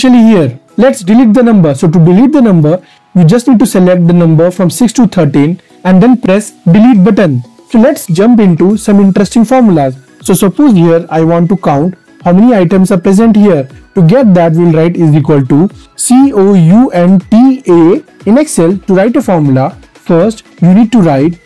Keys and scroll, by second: 5.7 Delete.